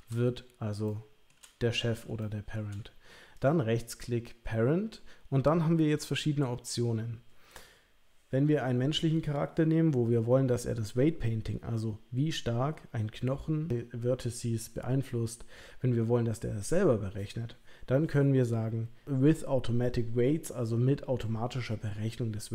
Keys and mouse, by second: 0.9-1.4 shift+middle drag, 2.2-2.5 shift+middle drag, 3.4-22.5 right drag.